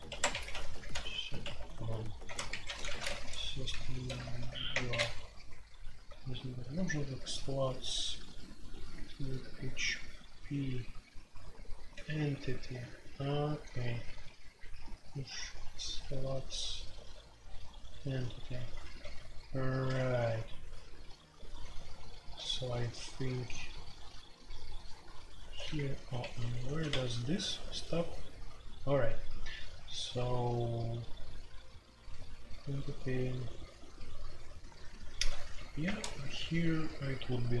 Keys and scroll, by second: 0.0-0.9 typing, 1.4 Escape, 2.2 ctrl+g, 2.5-6.6 typing, 4.7 Return, 5.0 Escape, 8.6-9.3 typing, 11.9 k, 14.1 typing, 18.3-19.0 typing, 20.1 typing, 21.6-22.1 typing, 23.3 typing, 25.9-27.8 typing, 29.1 typing, 33.6 i, 35.2-36.1 typing.